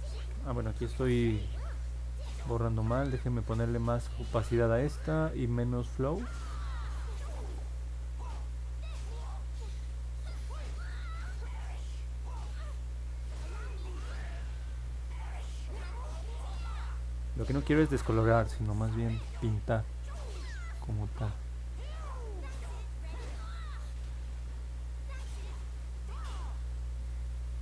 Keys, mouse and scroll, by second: 0.3 ctrl+z, 3.9 click, 8.1-16.0 drag, 20.3-25.3 drag.